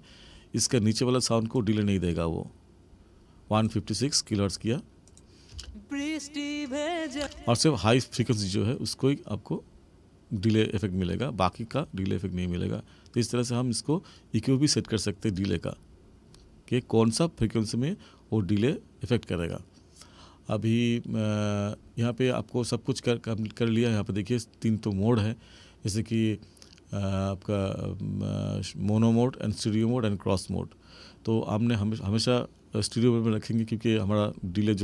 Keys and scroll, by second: 5.4 space, 7.1 space.